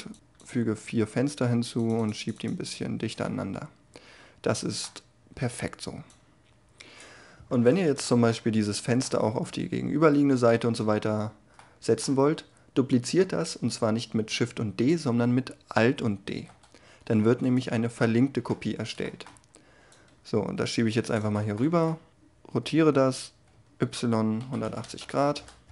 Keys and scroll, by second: 15.8 alt+d, 22.1 r, 23.5 y, 24.4 1, 24.6 8, 24.8 0, 25.3 Return.